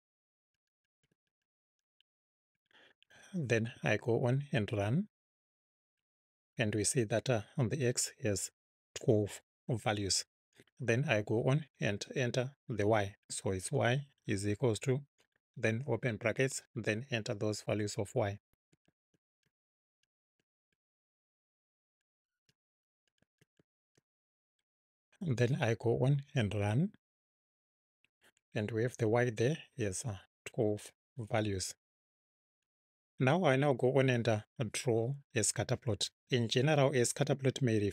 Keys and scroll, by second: 0.0-2.2 typing, 2.5 Right, 3.6 Right, 12.0 Return, 13.6 y, 14.6 =, 15.8 [, 18.4-24.9 typing, 31.6 Return.